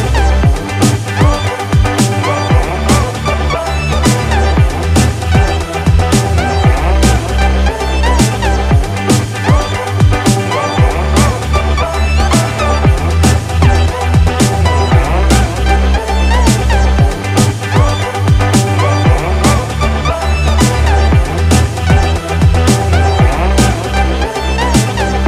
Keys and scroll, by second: 8.3 ctrl+z.